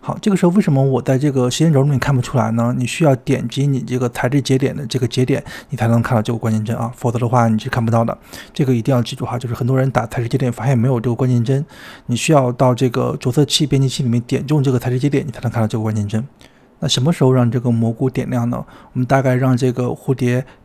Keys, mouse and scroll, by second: 1.0 drag, 3.7-4.9 drag, 7.0-9.6 drag, 15.4-19.0 drag.